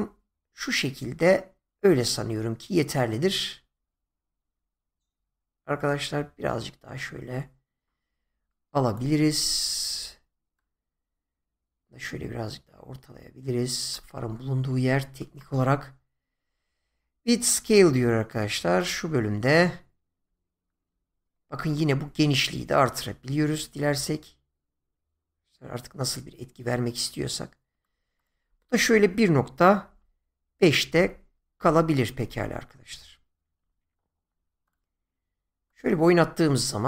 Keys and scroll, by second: 29.9-31.4 typing, 31.6 Return.